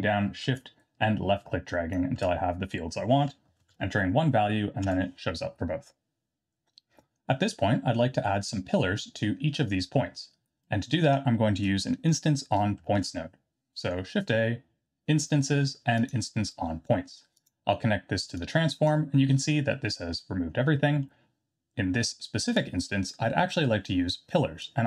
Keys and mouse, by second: 0.7-5.4 shift+drag, 10.8 middle click, 12.9 shift+a, 18.3-18.8 drag, 20.8 middle click, 22.7-23.0 drag, 24.6 click.